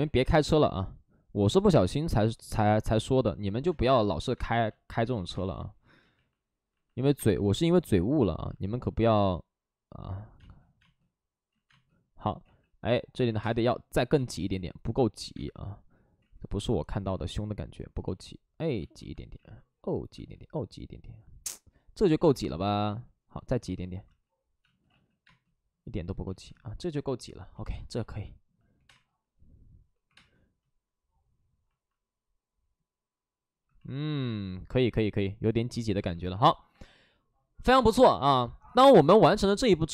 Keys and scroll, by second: 1.6 ctrl+z, 4.3 space, 4.9 ctrl+z, 5.0 ctrl+z, 5.3 space, 7.0 1, 7.2 space, 7.2 1, 8.3 ctrl+z, 10.3 space, 11.4 ctrl+z, 11.6 space, 12.3 ctrl+z, 13.3 ctrl+z, 13.3 space, 14.3 ctrl+z, 15.2 space, 16.1 ctrl+z, 22.8 ctrl+z, 24.0 ctrl+z, 24.6 space, 24.8 ctrl+z, 25.1 space, 28.7 space, 28.7 5, 28.7 space, 30.0 5, 38.3 alt+s, 38.6 alt+s.